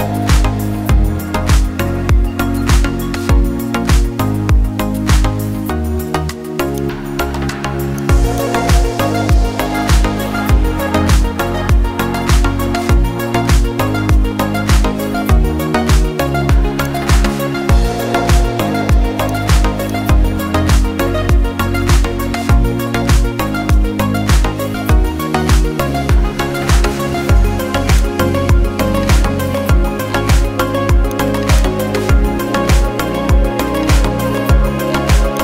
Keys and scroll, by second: 14.7 ctrl+t, 26.6 ctrl+z, 27.2 ctrl+z.